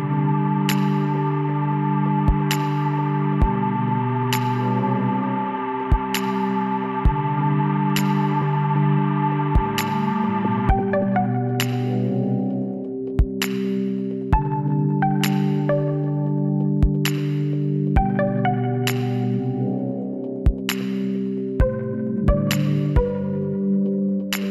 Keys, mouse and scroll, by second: 0.5 f, 1.7-3.8 right drag, 3.8 middle click, 4.4 KP_Decimal, 5.0 middle click, 7.6-9.3 middle drag, 9.3 KP_1, 11.4-13.0 drag, 13.0-15.1 middle drag, 15.1 f, 15.7-17.3 middle drag, 19.0 middle click, 19.8 KP_1, 21.7 KP_3.